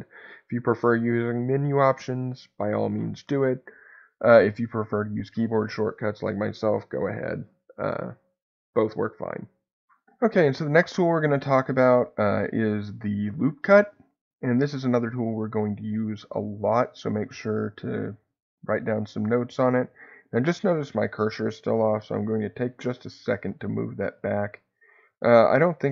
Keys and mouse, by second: 11.2 click, 14.3-15.3 middle drag, 15.9 middle click, 17.4 shift+middle click, 22.4 shift+s.